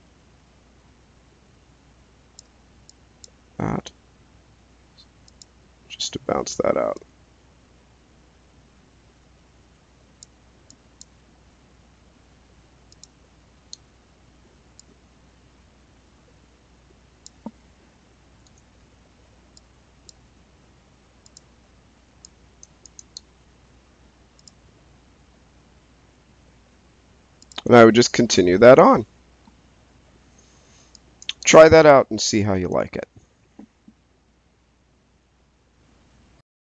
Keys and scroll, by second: 18.4 space.